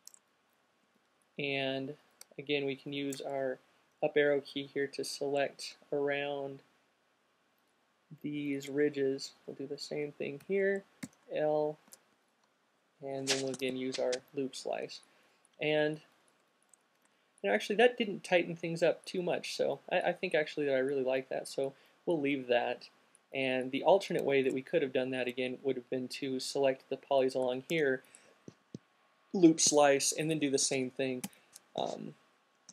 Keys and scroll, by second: 4.0 alt+shift+fn+Up, 4.5 Up, 4.9 Up, 5.3 Up, 9.5 fn+Up, 10.0 Up, 10.2 Up, 10.2 l, 12.2 c, 13.8 q, 27.7 alt+c, 30.8 alt+super+z.